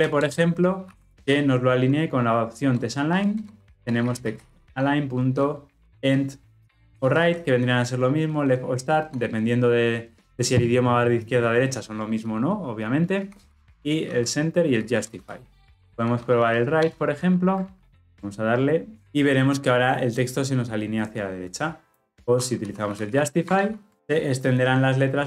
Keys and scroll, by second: 3.3 Return, 16.8 Return, 23.4 Return.